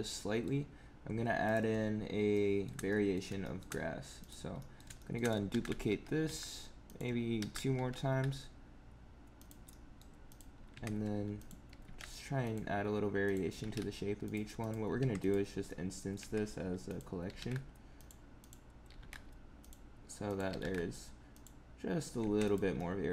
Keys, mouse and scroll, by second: 0.0 middle click, 1.5 click, 2.2 shift+middle click, 2.8 middle click, 3.3 shift+middle click, 3.7-4.1 scroll up 3, 4.1 click, 4.5 middle click, 4.9 middle click, 5.4 shift+d, 7.3 shift+d, 9.6 middle click, 10.2 click, 10.6 Tab, 11.3 click, 11.6 g, 13.2 click, 13.4 g, 14.5 click, 14.9 Tab, 15.1 click, 15.6 middle click, 16.1 Tab, 16.8 click, 17.2 g, 18.3 click, 18.8 g, 20.2 click, 20.4 g, 22.1 Tab, 22.3 click, 22.7 middle click.